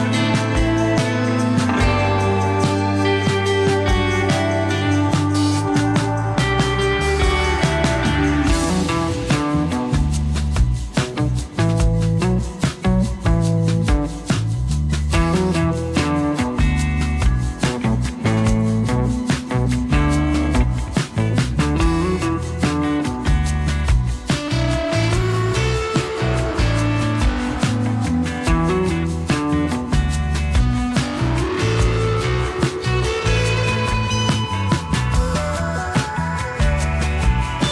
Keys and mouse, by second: 0.4 ctrl+click, 0.8 click, 1.6 click, 1.8 click, 2.0 shift+a, 3.0 g, 3.9 f, 3.9 1, 4.2 click, 5.3 click, 5.8 ctrl+z, 5.8 click, 6.2 click, 6.6 click, 6.8 click, 7.1 click, 7.4 f, 7.5 click, 8.3 click, 8.9 click, 9.5 click, 9.9 click, 10.1 click, 10.3 right click, 10.3 1, 11.5 right click, 12.2 right click, 12.6 right click, 13.0 middle click, 13.8 right click, 14.1 right click, 14.5 click, 14.8 click, 15.2 click, 15.7 click, 16.2 shift+d, 17.7 shift+d, 18.4 g, 19.9 middle click, 20.5 click, 21.2-22.6 drag, 21.2 f, 22.8 click, 23.1 click, 23.3 click, 23.5 f, 24.3 ctrl+z, 24.3-28.6 drag, 28.7 ctrl+z, 28.7-31.2 drag, 28.7 f, 31.7 shift+click, 32.0 shift+click, 32.5 click, 33.5 click, 34.1 3, 34.1 f, 35.0-37.0 ctrl+drag, 37.2 ctrl+click.